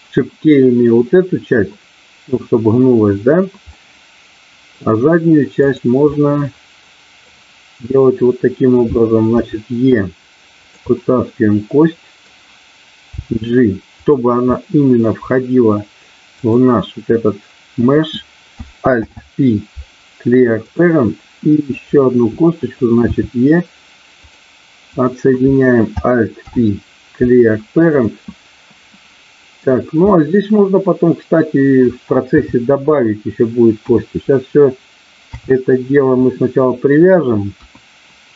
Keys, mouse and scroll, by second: 3.6 middle click, 5.6 click, 6.0-7.1 middle drag, 9.4 e, 10.5 click, 10.9-12.3 middle drag, 13.1 g, 13.9 click, 14.5 middle click, 16.3 click, 18.9 alt+p, 23.1 e, 24.9 click, 26.4 alt+p, 28.9 middle click, 30.1 middle click, 32.3 KP_3, 33.8 KP_1, 35.3 KP_3, 36.3 middle click, 37.5 KP_1.